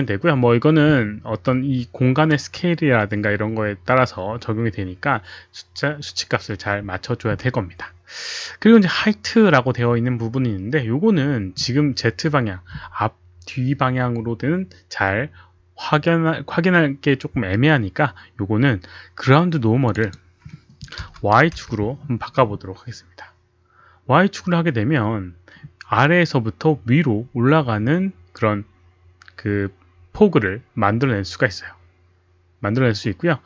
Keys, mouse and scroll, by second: 1.5 click, 2.7 click, 19.8 click, 20.0 click, 21.0 KP_0, 21.2 Tab, 21.4 KP_1, 21.5 Return, 25.0 Return, 25.0 Tab, 25.0 click, 25.0 KP_1, 25.0 KP_0, 29.8 Return, 29.8 Tab, 29.8 KP_1, 29.8 KP_0.